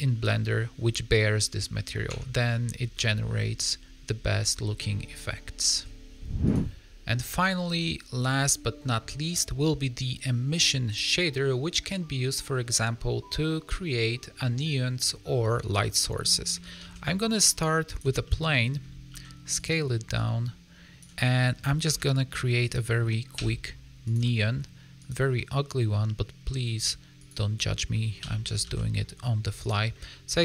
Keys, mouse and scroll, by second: 0.5 scroll down 2, 2.4 Tab, 2.5-2.9 scroll down 2, 2.9 middle click, 4.5 scroll down 2, 6.6 click, 15.7 middle click, 16.7 shift+a, 18.2 middle click, 19.0 s, 20.1 click, 21.3 middle click, 21.8 Tab, 22.5 click, 23.3 x, 24.3 middle click, 24.9 click, 25.3 middle click, 27.1 click, 27.8 middle click, 28.1 g, 29.9 middle click.